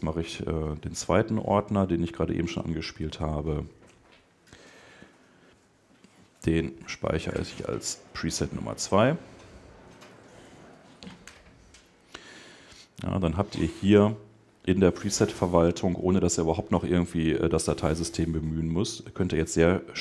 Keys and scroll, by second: 10.0 Right, 10.5 shift+Left, 11.3 shift+Return.